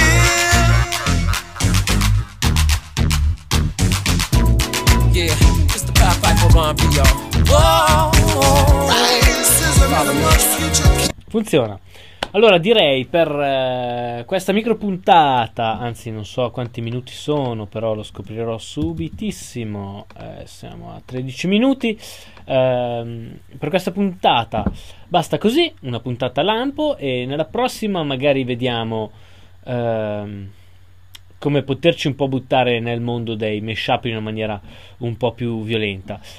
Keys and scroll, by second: 18.2 super+Tab.